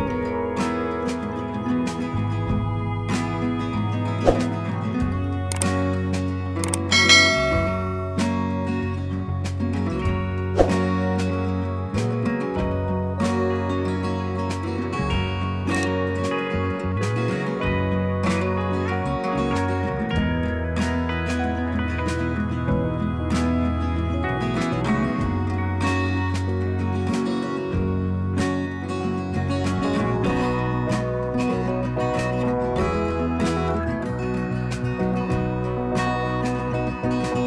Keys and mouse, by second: 0.3 click, 1.9 click, 3.2 click, 3.4 click, 10.0 click, 10.2 click, 12.0 click, 12.0 click, 16.1 click, 17.0 click, 17.5 click, 26.7 click, 29.1 ctrl+g, 30.3 click, 31.1 ctrl+s.